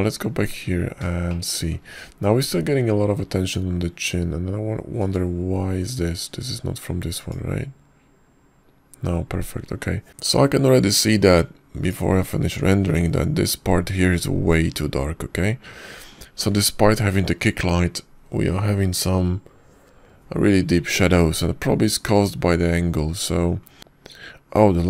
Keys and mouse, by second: 0.0 click, 3.2-3.7 shift+middle drag, 4.8 middle click, 6.9 click, 9.1 click, 9.4 middle click, 24.5 click.